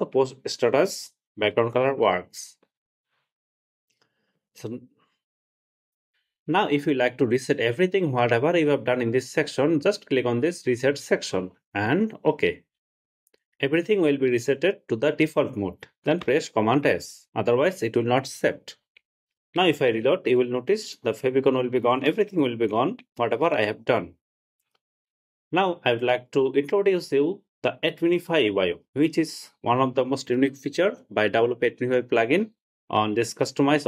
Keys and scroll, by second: 16.5 super+s, 22.4 super+r.